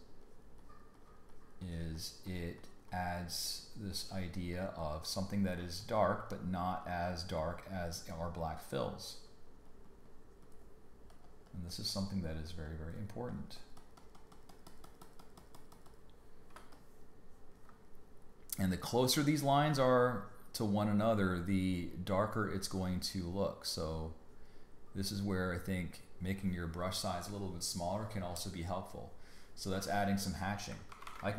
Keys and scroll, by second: 16.6 space, 28.0 space, 30.9 super+=.